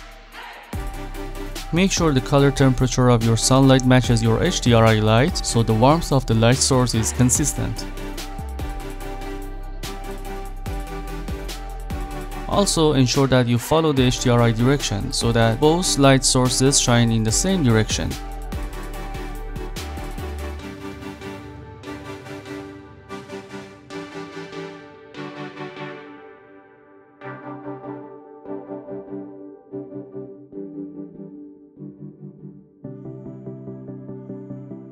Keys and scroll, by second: 9.1 ctrl+z.